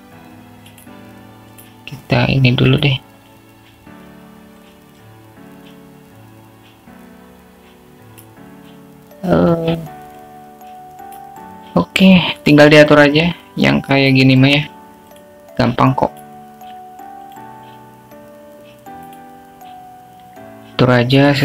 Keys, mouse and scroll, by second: 2.9 drag, 4.1 drag, 5.3 click, 6.8-11.0 drag, 12.4-13.9 drag, 16.6 click, 17.5 click, 18.6 click, 19.8 click, 21.3 click.